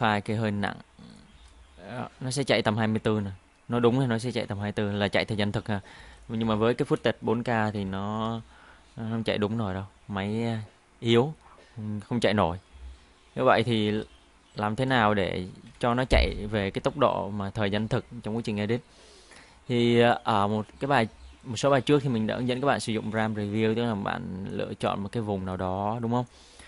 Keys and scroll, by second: 1.3 space, 6.0 space, 8.1 space, 13.8 space, 15.7 Delete, 17.7 Delete.